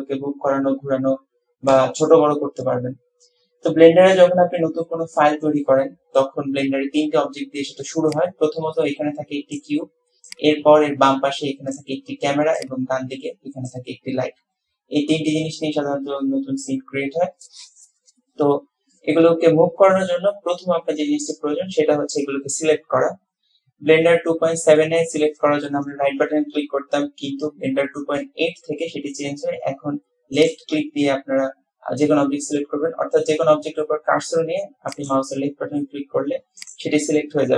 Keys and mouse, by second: 35.1 click, 36.6 click.